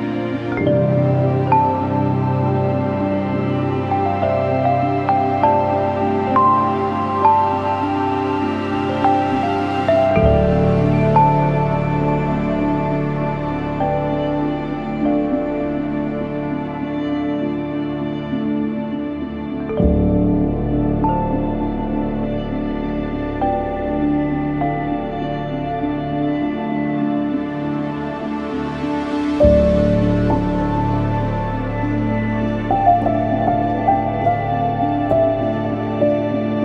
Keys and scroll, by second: 4.4 F1, 17.1 ctrl+shift+a, 23.6 f, 28.5-29.0 typing, 32.9 typing, 33.9-34.7 typing.